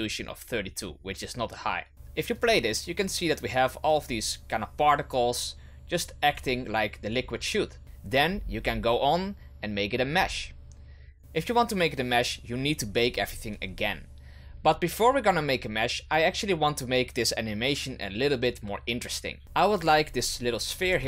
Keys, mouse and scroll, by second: 2.3-7.8 drag, 8.2-9.9 scroll down 8, 10.2 click, 11.2-12.8 scroll down 9, 19.4 right click, 20.8 g.